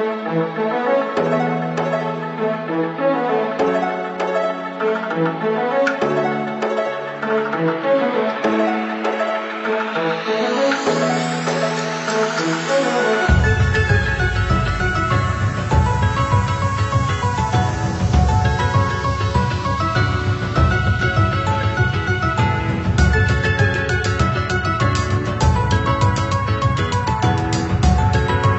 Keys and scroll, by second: 2.0 Left, 2.9 Up, 5.2 ctrl+0, 12.7 ctrl+c, 12.9 ctrl+v.